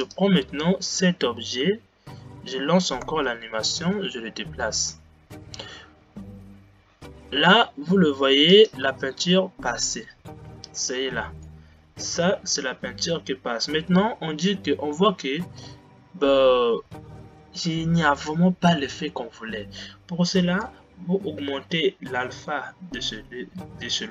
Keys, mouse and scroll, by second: 0.4 click, 3.1 space, 5.1 g, 9.1 space, 10.2-11.5 scroll up 3, 11.5-15.9 middle drag, 15.9 scroll down 1, 19.5 scroll down 2, 21.5-24.0 drag.